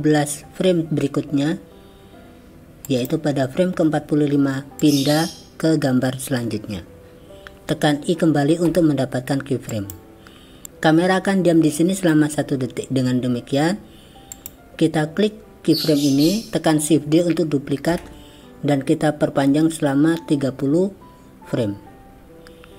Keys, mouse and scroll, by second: 2.9 click, 4.8-7.4 drag, 14.3 click, 18.0 shift+d.